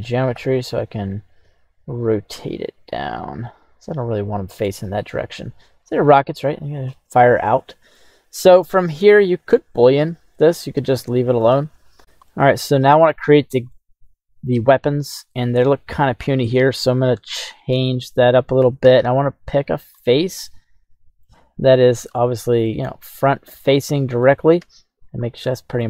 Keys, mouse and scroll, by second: 0.3 r, 1.4 x, 4.2 click, 4.6 middle click, 5.2-6.9 right drag, 6.9-7.9 middle drag, 8.4-9.1 right drag, 9.1-9.5 middle drag, 9.7 scroll up 2, 10.3 middle click, 11.1 shift+middle click, 11.7 right click, 12.3-13.1 middle drag, 13.7-15.7 middle drag, 16.9-18.8 right drag, 18.8 Tab, 19.4 right click, 20.0-21.2 middle drag, 22.1 scroll down 1, 22.1 middle click, 23.7 middle click, 24.6 KP_1, 25.1 scroll up 1, 25.5 shift+middle click.